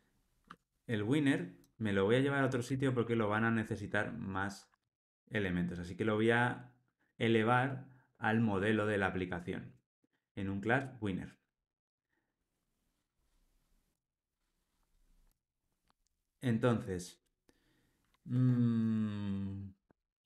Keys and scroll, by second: 2.7 super+x, 4.8 super+v, 9.7 super+BackSpace.